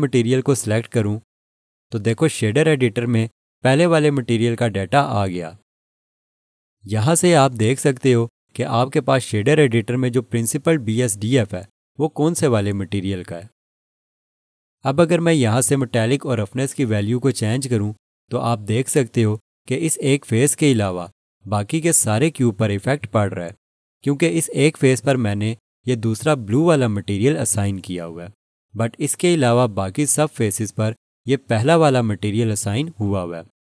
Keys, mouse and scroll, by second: 0.4 click, 18.0 click.